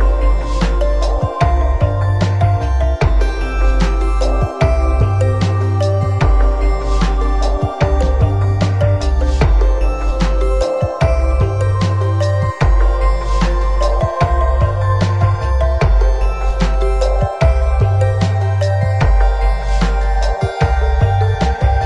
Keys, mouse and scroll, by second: 0.1 KP_0, 0.7-1.0 scroll up 2, 1.7 n, 2.7 click, 4.3 click, 5.2 n, 5.7 scroll up 2, 6.1 middle click, 7.4 middle click, 10.8 middle click, 12.1 middle click, 12.8 scroll down 1, 13.1 middle click, 14.5 middle click, 15.5 shift+middle click, 15.6 shift+middle click, 16.3 scroll up 1, 19.8 click.